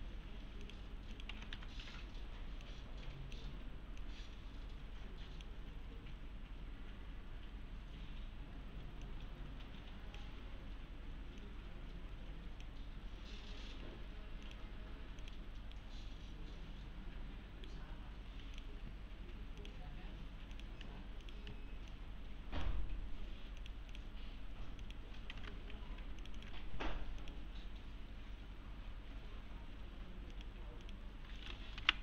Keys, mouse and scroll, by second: 0.0 3, 0.6 click, 1.1-2.0 typing, 2.7-3.6 drag, 9.1-10.3 click, 15.8-17.9 right click, 19.6 click, 20.6 click, 25.4 alt+Tab, 26.2 alt+click, 28.5 scroll down 1, 29.1 scroll up 1, 30.3 click, 31.8 F10.